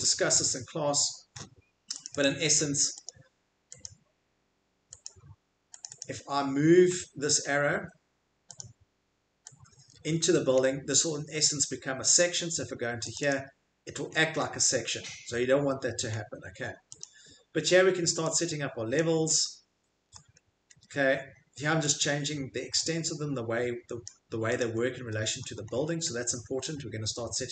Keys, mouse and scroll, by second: 0.3 middle click, 2.0 click, 2.3 click, 3.1 click, 3.8 click, 4.5 scroll, 5.0 right click, 5.8 right click, 6.0 right click, 7.3-7.6 scroll, 8.6 right click, 8.6 scroll, 10.2 click, 10.2 middle click, 10.4 Escape, 10.6 middle click, 11.1 middle click, 11.3 middle click, 12.8 scroll, 13.1 click, 13.3 click, 13.3 middle click, 14.1 middle click, 14.3 middle click, 16.1 middle click, 17.0 click, 17.0-17.6 scroll, 19.0 click, 20.1-21.1 scroll, 24.0 click, 24.6 click, 24.8 middle click, 25.0 middle click, 25.4-26.2 scroll, 26.3 Escape, 26.3 middle click.